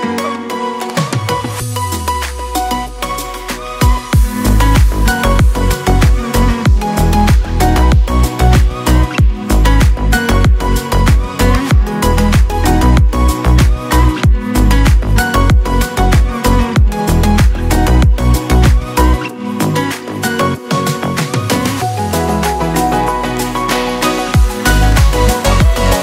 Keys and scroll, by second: 0.9 ctrl+z, 1.5 ctrl+z, 4.5 [, 5.2 ctrl+z, 7.9 Tab, 9.6 Tab, 12.8 Tab, 15.7 alt+q, 21.2 ctrl+z, 21.2-22.4 typing, 23.6 ], 24.8 Tab.